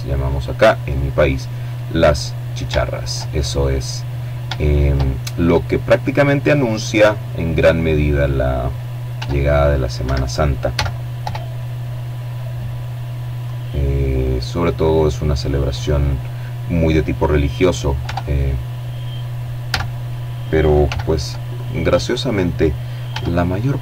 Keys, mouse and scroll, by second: 0.4 middle click, 0.9 shift+middle click, 2.8 shift+middle click, 3.1-3.5 shift+scroll up 1, 3.5 shift+click, 4.7 middle click, 5.6-6.3 scroll up 1, 7.3 s, 8.2 Escape, 8.9 s, 9.4 y, 10.5 click, 10.7 middle click, 12.4-14.3 drag, 16.2 Tab, 17.9 a, 19.0 b, 19.7-20.7 drag, 21.3 s, 22.5 click, 23.2 Tab.